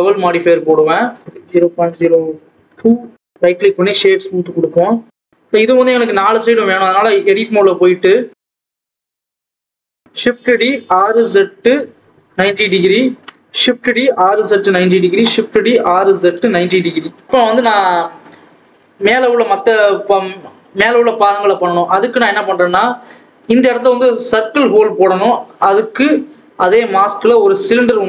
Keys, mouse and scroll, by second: 0.0 click, 1.6 KP_0, 2.3-3.4 drag, 3.4 KP_0, 4.1 right click, 4.2 alt+a, 4.3 scroll down 1, 4.4 scroll up 1, 4.5 scroll down 1, 5.1 click, 5.6-6.9 scroll up 2, 6.9 click, 8.2-9.6 drag, 9.6 a, 9.9 shift+d, 10.7 r, 13.4 shift+d, 14.0 r, 14.9 shift+d, 15.6 r, 17.3 click, 21.6-22.8 scroll up 1, 23.4 click, 25.1 KP_7, 26.8 click.